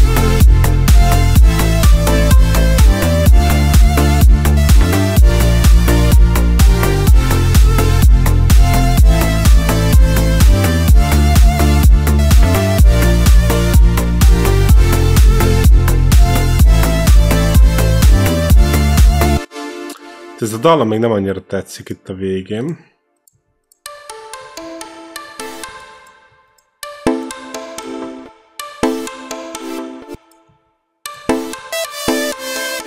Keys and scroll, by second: 19.1 space, 23.5 space, 28.1 space, 29.9 space.